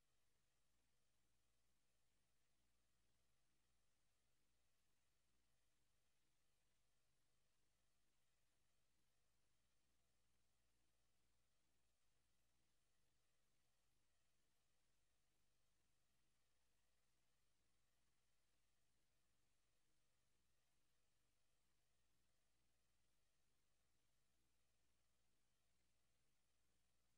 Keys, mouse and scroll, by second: 0.8 click, 9.6 click, 16.1 click, 18.1 click, 23.9 click.